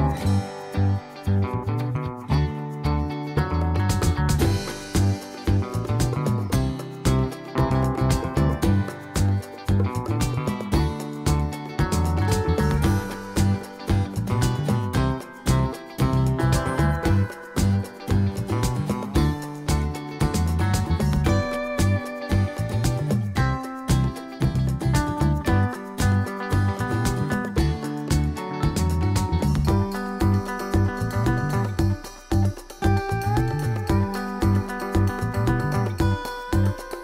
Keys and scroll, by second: 1.2 super+c, 25.2 super+d, 27.4 super+d, 30.4 super+d, 32.8 super+d, 36.5 super+d.